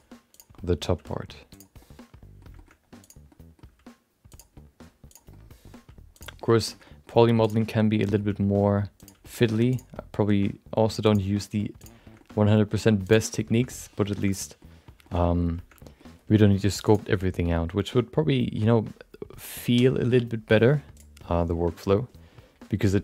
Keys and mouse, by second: 0.3 click, 0.5 middle click, 0.9 g, 1.9 middle click, 2.6 middle click, 3.0 click, 3.3 middle click, 3.6 g, 4.6 middle click, 5.1 click, 5.3 middle click, 5.7 g, 6.5 middle click, 6.9 middle click, 7.4 click, 7.6 middle click, 8.2 g, 9.4 middle click, 9.7 click, 9.9-11.2 middle drag, 10.3 g, 11.4 middle click, 11.8 click, 12.0 shift+middle click, 12.1 middle click, 12.6 g, 13.7 middle click, 14.2 middle click, 15.1 middle click, 15.9 middle click, 16.9-23.0 drag.